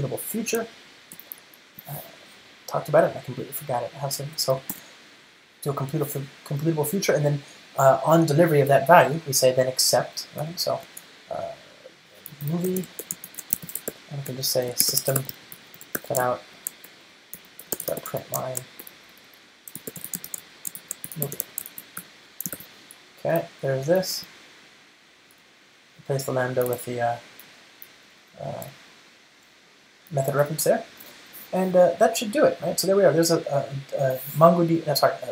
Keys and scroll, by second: 1.3 ctrl+alt+shift+Left, 1.5 Return, 5.3 ctrl+space, 10.5 Return, 23.0 alt+super+l, 24.4 alt+Return.